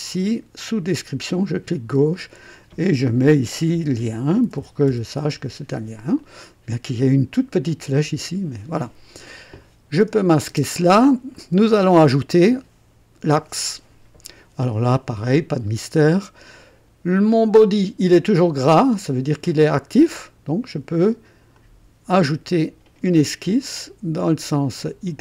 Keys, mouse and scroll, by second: 1.4 click, 2.0 F2, 3.5-6.4 typing, 6.1 click, 9.9 click, 10.5 space, 11.3-13.8 drag, 21.5 click, 25.0 click.